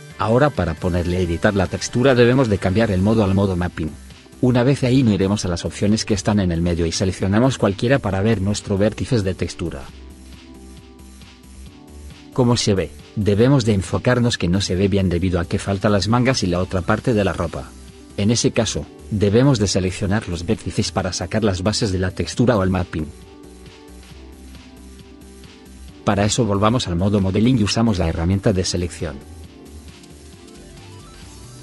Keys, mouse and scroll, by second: 0.0 right click, 6.7 middle click, 12.3 middle click, 17.4 middle click, 18.5 right click.